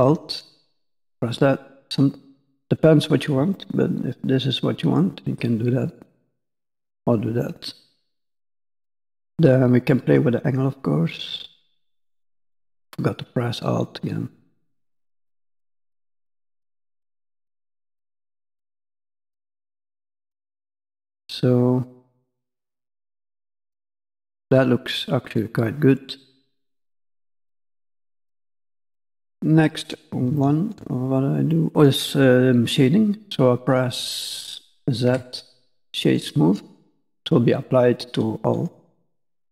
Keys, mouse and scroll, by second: 0.4 alt+click, 1.4 middle click, 2.3 middle click, 3.8 middle click, 6.0 alt+click, 7.4-8.4 scroll down 1, 8.4-9.1 scroll down 2, 9.3 click, 12.6 alt+click, 19.9-20.4 scroll down 3, 20.1 middle click, 21.9 middle click, 22.3-22.8 scroll up 2, 22.8 middle click, 24.1-25.4 scroll down 7, 26.3 click, 27.2-29.2 scroll up 15, 29.2 middle click, 29.2 scroll up 2, 30.3 shift+middle click, 31.3 scroll down 2, 31.4 middle click, 35.0 z, 36.7 middle click, 37.2-37.8 scroll up 2, 37.9 middle click.